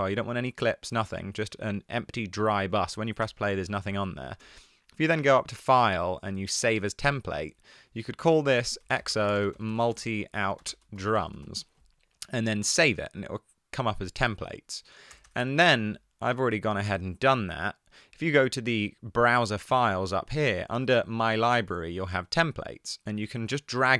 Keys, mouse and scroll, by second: 0.3 Tab, 0.8 Tab, 9.0-11.4 typing, 14.2 click, 15.3 BackSpace, 15.6 BackSpace.